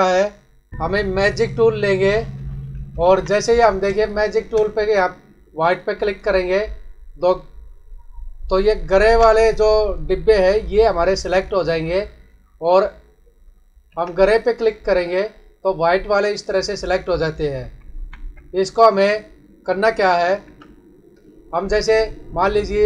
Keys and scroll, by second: 3.0 ctrl+=, 3.8 space, 8.7 ctrl+=, 9.4 space, 13.8 ctrl+d, 17.8 ctrl+-, 20.4 ctrl+d.